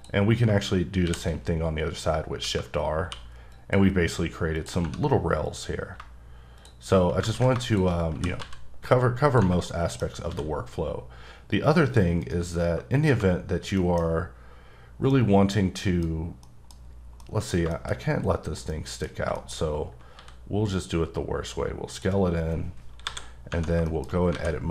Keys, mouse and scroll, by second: 1.0 shift+r, 1.6-1.9 scroll up 1, 1.9-2.4 scroll down 1, 2.4 Tab, 3.0 q, 3.5 click, 4.6 click, 4.8 Tab, 5.4 click, 7.3 ctrl+z, 7.7 shift+click, 8.1 g, 8.4 z, 9.2 click, 9.4 Tab, 9.7 middle click, 10.3 s, 12.2 right click, 12.6 Tab, 13.1 Tab, 13.5 scroll down 1, 13.8 middle click, 15.1 middle click, 16.7 middle click, 17.2 middle click, 17.9-18.7 shift+scroll up 2, 18.7 middle click, 18.9-20.2 scroll down 5, 19.3 shift+middle click, 20.2 s, 21.9 click, 22.2-23.0 scroll down 2, 23.0 KP_7, 23.5 Tab, 23.9 shift+middle click, 24.1 shift+scroll down 1, 24.3 alt+a.